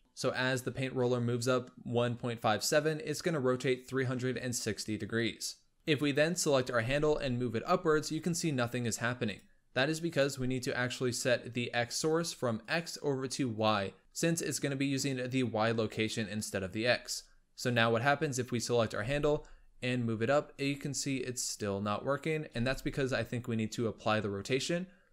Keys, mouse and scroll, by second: 5.9 click, 6.6 g, 9.9-10.9 drag, 11.3 scroll down 4, 12.4-14.2 drag, 17.5-18.7 drag, 18.8 g, 22.4 ctrl+a.